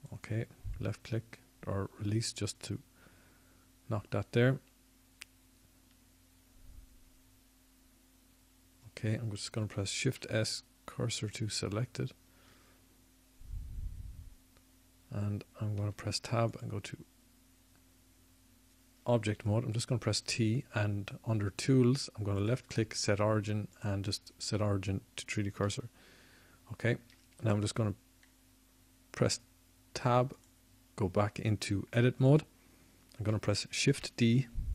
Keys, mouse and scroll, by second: 6.6 middle click, 15.2 shift+s, 21.0 Tab, 24.6 t, 27.6-34.5 drag, 30.8 t, 34.5 Tab.